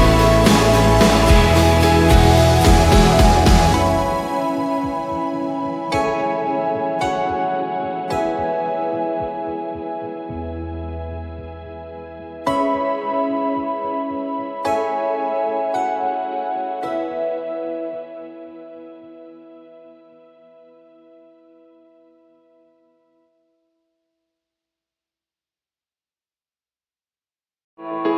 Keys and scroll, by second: 3.3-6.7 typing, 8.0-11.2 typing, 13.1-16.6 typing, 17.6 typing, 17.8 Return, 20.2-22.0 typing, 22.7 Return, 23.3-24.4 typing, 25.5-27.0 typing.